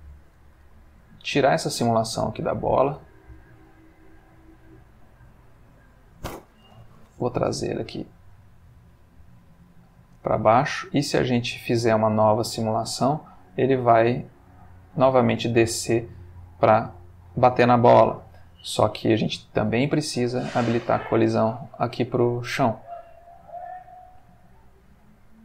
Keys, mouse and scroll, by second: 2.3-2.8 middle drag, 2.9 middle click, 3.3 middle click, 4.7 click, 6.7 g, 7.2 z, 9.7 click, 10.2 space, 15.1-17.8 middle drag, 18.2 Escape, 18.7 click, 20.2 click, 21.3 space.